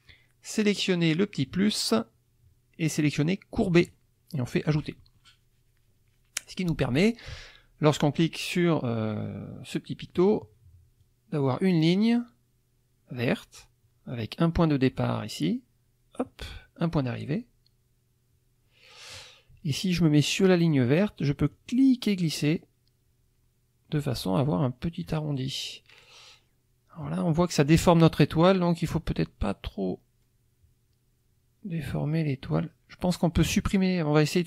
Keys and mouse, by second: 1.3 click, 3.6 click, 4.6 click, 10.2 click, 14.8-16.4 drag, 17.2-19.3 drag, 21.5-25.2 drag, 28.8-32.7 drag.